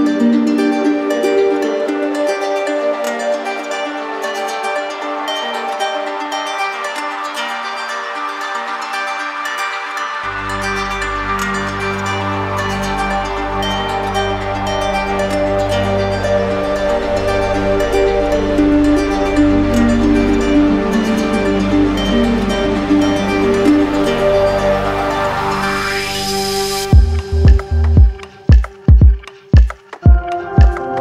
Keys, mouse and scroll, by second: 6.7 click, 8.7 shift+click, 11.1 click, 13.5 ctrl+click, 16.7 shift+click, 22.3 click, 22.9 ctrl+click, 24.1 q, 24.9 click, 25.7 click, 27.9 click.